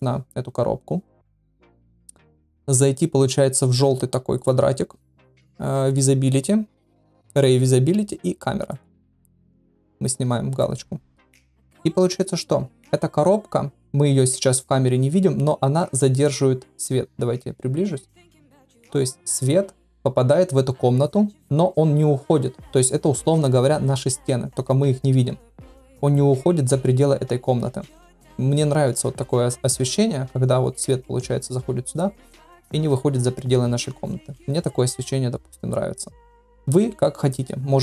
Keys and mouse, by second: 4.3 click, 6.0 click, 8.7 click.